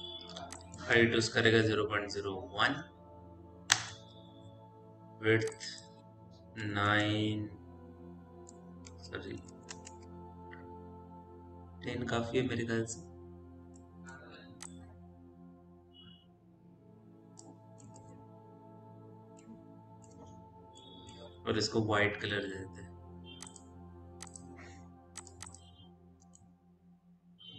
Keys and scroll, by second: 1.5 KP_Decimal, 1.9 KP_0, 2.4 KP_1, 3.4 Return, 6.7 Return, 8.4 Tab, 9.1 KP_1, 9.6 Return, 9.6 KP_0, 18.8 p, 21.4 m.